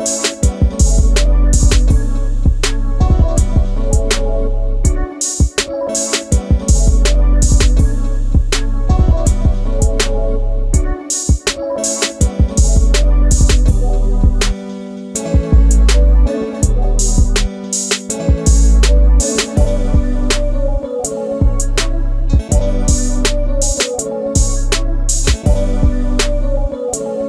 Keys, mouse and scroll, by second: 2.3 ctrl+z, 5.4 1, 5.5 1, 8.2 m, 10.8 shift+8, 12.2 3, 12.3 Return, 12.8 space, 13.9 shift+middle click, 17.5 shift+c, 19.5 shift+x, 23.3 shift+c, 23.6 space, 23.7 Escape, 24.8 shift+middle click, 27.0 space, 27.0 Escape.